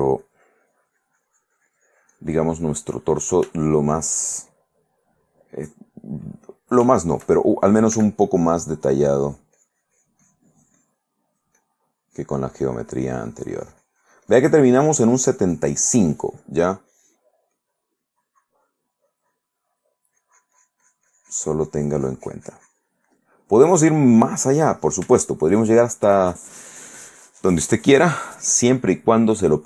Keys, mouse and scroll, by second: 0.4-3.6 drag, 3.8 shift+middle click, 4.8-6.9 shift+middle drag, 7.1 shift+middle click, 8.1 f, 8.4 click, 8.9-11.4 drag, 11.5-16.0 drag, 17.7-19.1 drag, 19.2-23.3 drag, 24.4 click, 25.3 shift+click.